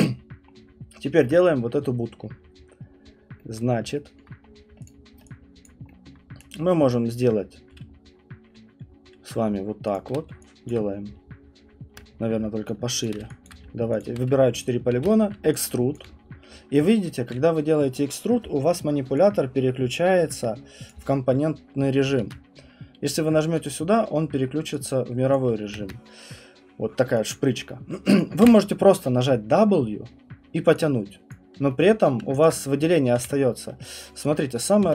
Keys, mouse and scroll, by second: 0.5 middle click, 3.5 middle click, 4.1 alt+middle click, 4.2 alt+middle click, 4.5 middle click, 4.9 click, 5.7 alt+click, 6.1 middle click, 6.9 right click, 7.2 click, 7.9 middle click, 8.0 middle click, 13.4 alt+click, 14.0 shift+click, 14.9 ctrl+e, 15.9 alt+click, 22.2 ctrl+z, 23.6 click, 25.3 click, 27.3 click, 28.4 w, 31.3 click, 31.8 alt+middle click, 33.2 r, 34.6 click, 34.8 w.